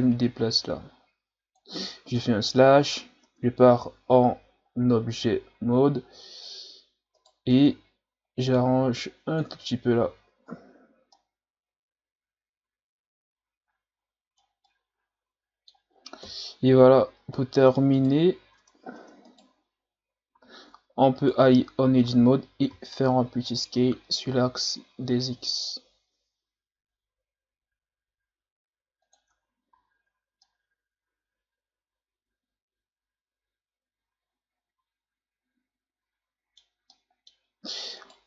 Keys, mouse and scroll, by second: 2.2 KP_Divide, 3.2 Tab, 3.6 a, 4.0-4.5 scroll down 3, 4.5-5.4 scroll up 3, 5.4-6.1 scroll up 4, 7.2 right click, 7.5 Tab, 8.5-9.5 drag, 9.5 Tab, 10.0 a, 10.4 scroll down 4, 11.1-14.2 middle drag, 14.7-16.2 middle drag, 16.2 KP_1, 16.9-17.5 shift+scroll up 4, 17.9 right click, 18.6 Tab, 19.0 Tab, 19.3 right click, 20.3 s, 21.4 Tab, 21.8 a, 22.0 a, 22.8 s, 29.3 Tab, 29.7 a, 30.0 scroll down 3, 30.4-33.4 middle drag, 36.9-37.6 middle drag, 37.6 scroll up 1, 38.0 right click.